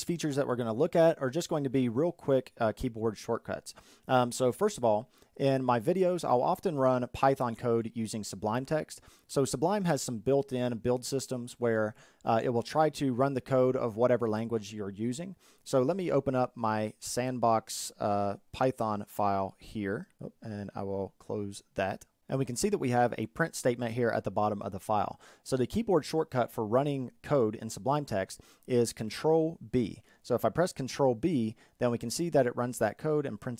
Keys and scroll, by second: 28.9 ctrl+b.